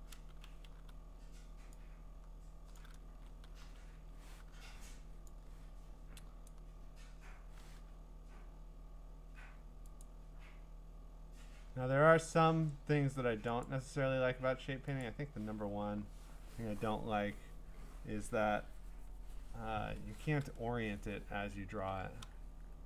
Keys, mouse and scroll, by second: 0.0-0.7 typing, 2.7 click, 3.1 ctrl+z, 3.6-5.0 typing, 6.5 click, 10.0 click, 13.6 click, 15.0 click.